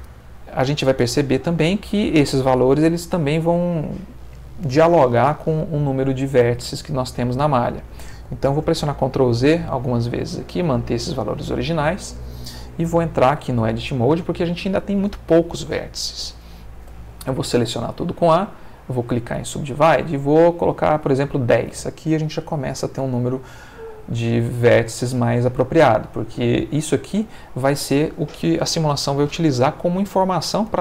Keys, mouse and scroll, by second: 6.4 Escape, 8.6 ctrl+z, 9.3 ctrl+z, 12.9 Tab, 16.8 a, 17.9 right click, 18.5 click, 19.8 click, 23.8-26.2 middle drag, 26.4 ctrl+middle click.